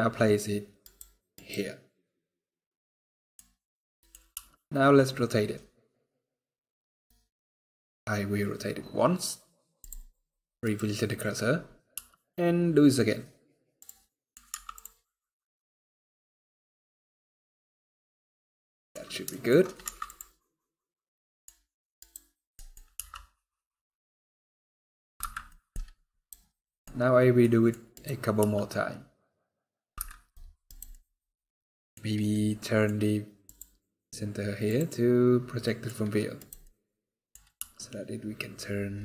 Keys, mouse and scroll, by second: 0.6 right click, 1.1 right click, 2.5 middle click, 3.4 middle click, 4.2 r, 10.4 right click, 10.9 scroll up 1, 11.3 scroll down 1, 11.6-12.0 scroll down 2, 11.6 r, 13.8 scroll down 1, 13.8 middle click, 14.2 Tab, 14.9-15.4 scroll down 4, 15.2 middle click, 19.0 shift+middle click, 19.6 Tab, 20.8-21.2 scroll down 1, 21.7 right click, 22.3 middle click, 22.5 scroll down 1, 22.8 r, 25.2 middle click, 25.6 scroll down 1, 25.9 right click, 26.4 middle click, 26.6 scroll up 2, 27.1 middle click, 27.1 scroll up 2, 27.7 right click, 28.2 r, 30.4 right click, 30.6 middle click, 32.0 middle click, 33.2 click, 35.4 middle click, 36.1 right click, 36.4 middle click, 37.3 r.